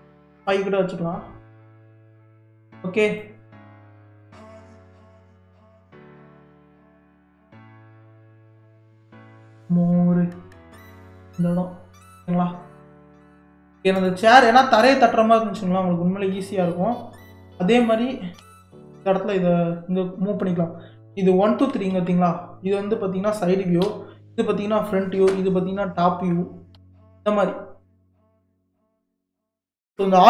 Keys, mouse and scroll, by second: 2.1 click, 2.5-3.1 scroll up 1, 3.1 click, 4.1 g, 7.0 scroll up 1, 7.7-8.9 shift+middle drag, 8.9 g, 14.0 click, 14.5-15.0 middle drag, 15.0-15.3 scroll down 1, 15.3-17.3 middle drag, 17.3 KP_1, 18.4 KP_3, 21.6 KP_1, 21.9 KP_3, 23.8 KP_1, 25.8-26.3 KP_7, 26.7 KP_3, 28.5 click, 29.5 g.